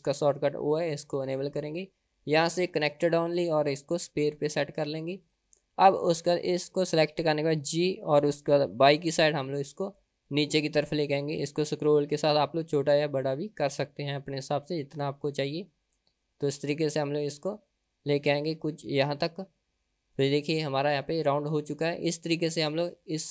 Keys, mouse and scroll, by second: 0.6 click, 1.7-5.2 drag, 5.3 click, 6.3 click, 7.7 g, 20.2-22.4 middle drag, 23.1 middle click.